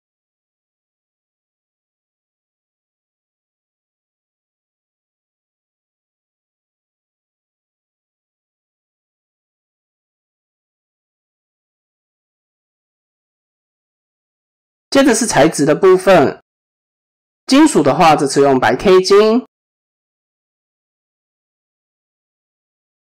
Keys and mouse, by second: 3.4 middle click, 4.6 KP_7, 5.4 Tab, 6.9 middle click, 8.1 Tab, 8.5 click, 9.3 ctrl+r, 11.1 KP_7, 12.0 click, 12.2 Tab, 12.7 shift+middle drag, 13.8 click, 14.9 click, 15.2 right click, 18.5-19.8 drag, 21.8 click.